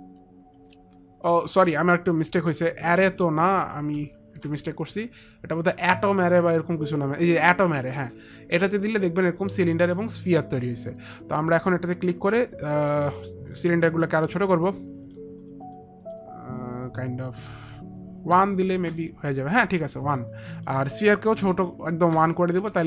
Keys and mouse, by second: 0.7 F9, 2.7 ctrl+z, 3.7 ctrl+z, 3.7 F9, 11.7 click, 15.5 click, 15.8 click, 16.1 click, 16.3 click, 20.6 click, 22.2 Return.